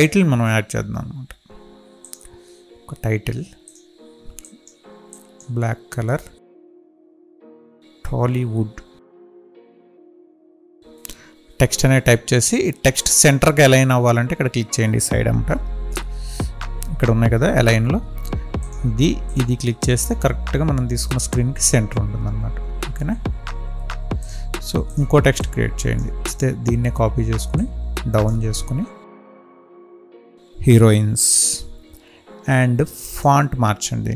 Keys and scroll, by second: 9.7 ctrl+a, 29.4 ctrl+a, 31.1 ctrl+a.